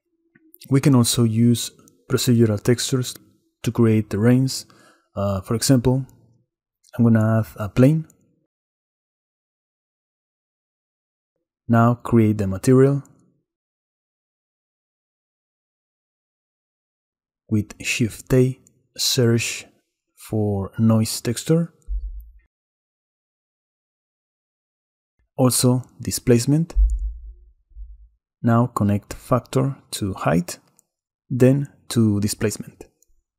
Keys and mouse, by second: 4.2 click, 4.7 shift+a, 9.0 s, 10.0 click, 10.1 ctrl+b, 14.8 drag, 15.7 click, 16.9 click, 17.4 click, 18.5 shift+a, 25.1 shift+a, 29.9-32.4 drag.